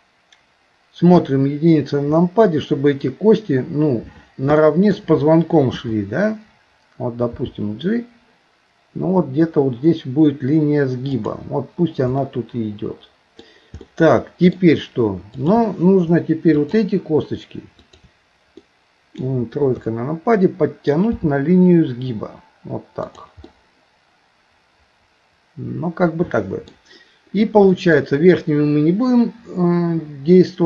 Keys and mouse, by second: 1.2 KP_1, 4.6 shift+middle click, 7.3 g, 12.2-13.4 middle drag, 13.8 middle click, 15.4 click, 16.5 shift+click, 17.8 shift+click, 18.6 middle click, 19.7 KP_3, 21.2 g, 23.5-26.7 middle drag, 27.8 middle click.